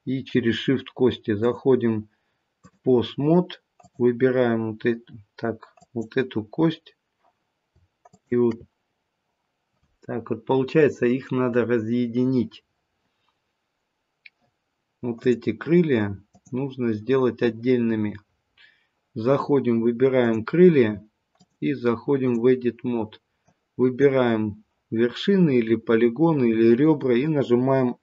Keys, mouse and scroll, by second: 1.3 click, 3.7 click, 8.0 shift+click, 15.1 click, 20.1 click, 21.3 click.